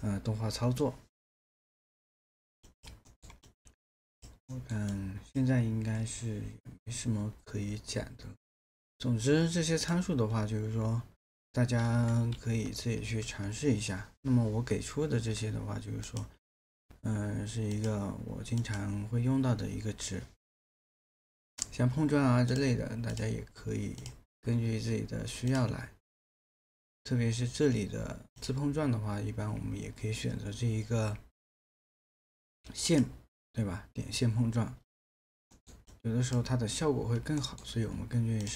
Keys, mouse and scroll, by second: 3.1 alt+middle click, 4.5 alt+middle click, 12.4 ctrl+a, 35.5 alt+middle click, 37.4 alt+middle click.